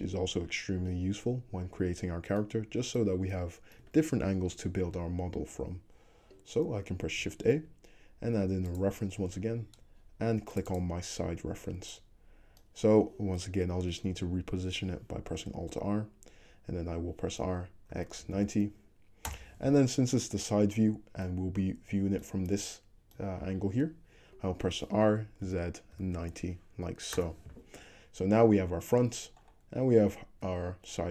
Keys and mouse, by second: 3.1-3.8 shift+drag, 7.4 shift+a, 15.6 alt+r, 17.4 r, 25.0 r, 28.4 `, 29.8 `.